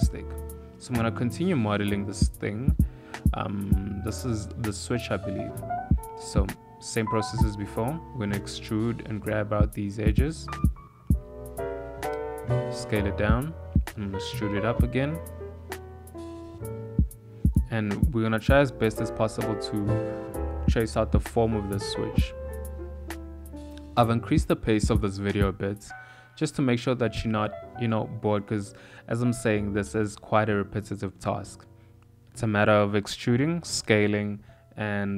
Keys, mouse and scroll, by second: 0.0 ctrl+middle click, 0.6 s, 2.8 Tab, 4.1 1, 5.7 click, 6.3 click, 9.1 g, 10.7 e, 11.4 s, 13.1 e, 17.7 ctrl+KP_Add, 18.4 s, 23.1 click, 23.7 e, 26.0-28.4 typing, 26.6 click, 29.8 s, 31.5 s, 32.1 e, 33.7 s.